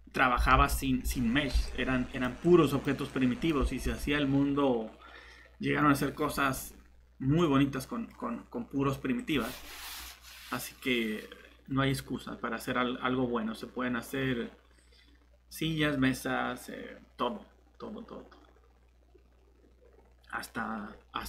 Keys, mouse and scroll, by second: 0.3 Tab, 0.5 Tab, 2.9 Tab, 2.9-3.8 typing.